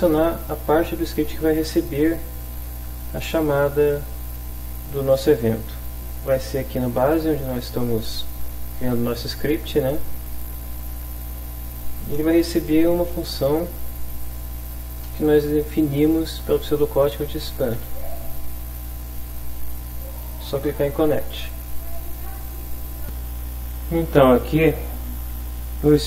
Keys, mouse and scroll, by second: 7.0 click, 8.5-9.5 drag, 12.9-14.2 drag, 15.1 BackSpace, 16.6-17.7 typing, 21.5 click, 22.4 click, 23.7 click, 25.3 alt+Tab.